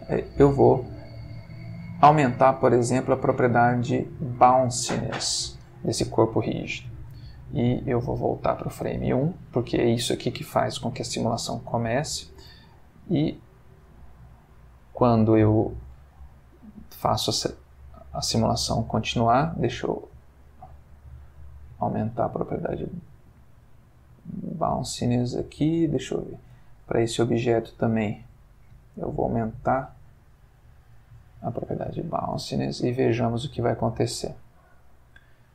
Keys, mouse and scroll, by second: 0.6 click, 1.5 middle click, 2.3-5.0 drag, 5.5 space, 6.9 Escape, 8.2 click, 11.1 space, 17.3-18.4 middle drag, 18.4-19.3 scroll up 1, 19.3 scroll up 1, 19.5 Escape, 20.1-21.3 drag, 21.6 click, 22.8 click, 24.3 click, 26.5 click, 28.6-30.9 drag, 31.9 click, 32.3 space.